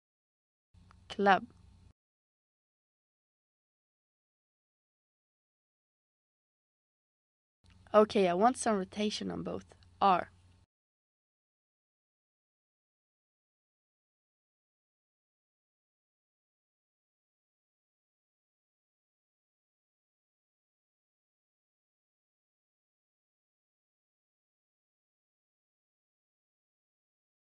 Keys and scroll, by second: 0.9-2.1 typing, 3.8 shift+Right, 4.1 shift+Right, 4.4 shift+Right, 9.7 r, 22.4 Up, 22.6 Up, 22.7 Up, 23.1 Up, 23.4 Up.